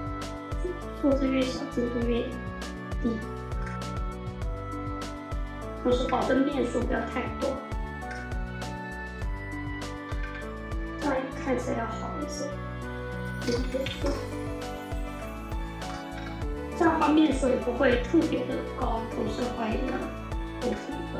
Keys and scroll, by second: 5.4 F4, 8.0 space, 8.2 6, 8.3 Return, 9.9 F4, 13.0-14.2 typing, 16.0 F4.